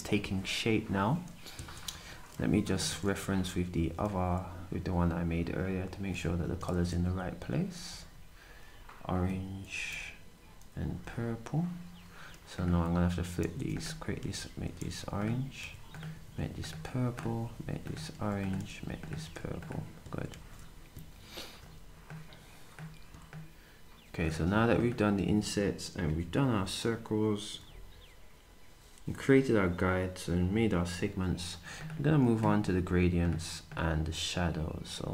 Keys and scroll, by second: 10.5 Up, 10.7 Down, 13.5 typing, 18.6 typing, 20.9 typing, 22.8-23.6 typing.